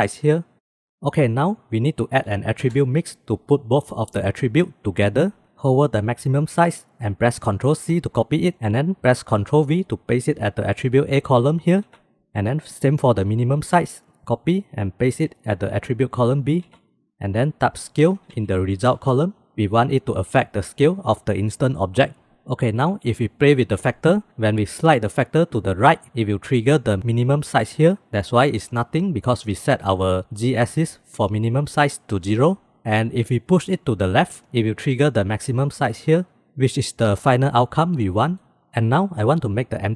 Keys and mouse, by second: 1.2 shift+a, 4.8 middle click, 7.5 ctrl+c, 11.7 ctrl+v, 13.5 ctrl+c, 16.7 ctrl+v, 17.7-19.5 drag, 23.5-25.3 drag, 26.5-27.4 drag, 28.2-28.6 middle drag, 33.4-34.4 drag, 35.7 click, 36.8-37.1 drag.